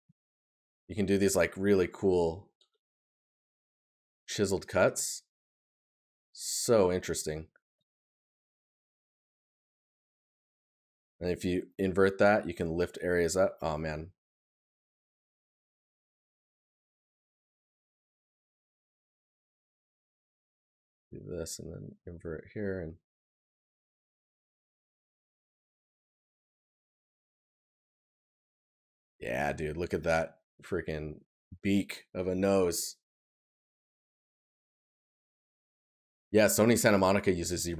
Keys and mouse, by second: 5.1 right click, 7.2 right click, 12.3 right click, 27.2 right click, 30.2 right click.